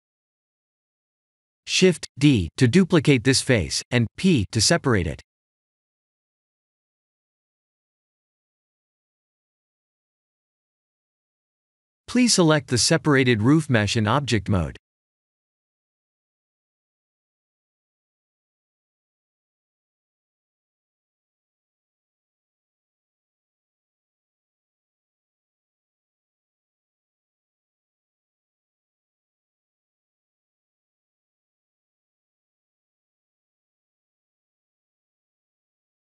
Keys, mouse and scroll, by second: 0.5 3, 0.8 click, 1.5 middle click, 4.5 shift+d, 7.5 KP_Enter, 8.7 p, 10.8 middle click, 12.0 click, 13.4 middle click, 14.3 s, 14.6 y, 16.0 click, 16.3 ctrl+z, 18.3 click, 19.1 click, 19.5 Tab, 19.9 click, 20.5 click, 22.3 middle click, 23.4 s, 23.7 y, 26.0 click, 27.5 Tab, 28.0 2, 28.1 click, 29.0 KP_1, 30.3 g, 35.0 click, 35.5 middle click.